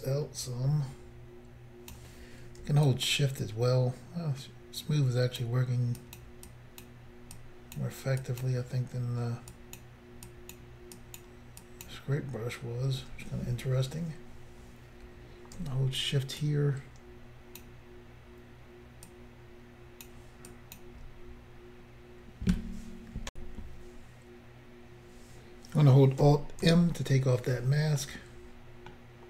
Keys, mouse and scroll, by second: 2.9 shift+click, 6.0 shift+click, 6.2 shift+click, 6.5 shift+click, 7.4 shift+click, 8.2 shift+click, 8.4 shift+click, 9.5 shift+click, 10.3 shift+click, 11.0 shift+click, 11.6 shift+click, 16.4 shift+click, 20.5 shift+click, 23.3 Insert, 26.6 alt+m, 28.0 middle click.